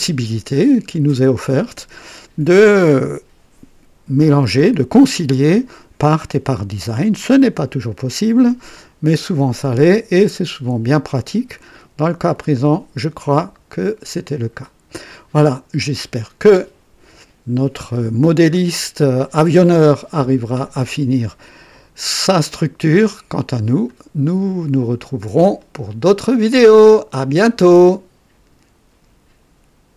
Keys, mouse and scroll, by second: 0.6 scroll up 1, 1.2 right click, 12.5-15.3 drag, 15.8 right click, 21.1-24.1 drag, 24.2-25.8 drag, 25.9-27.4 drag, 29.0 right click, 29.9 click.